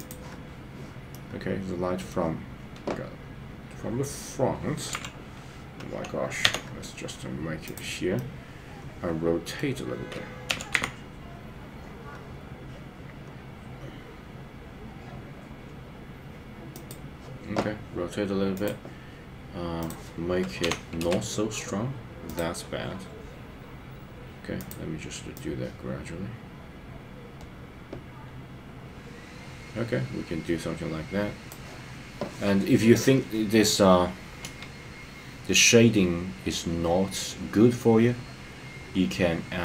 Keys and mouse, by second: 1.1-2.1 middle drag, 5.0 KP_7, 6.4 g, 8.1-9.6 middle drag, 10.4 r, 10.7 z, 16.7 click, 19.9-21.1 drag, 22.3-24.6 drag, 25.3-31.5 drag, 34.5 KP_0.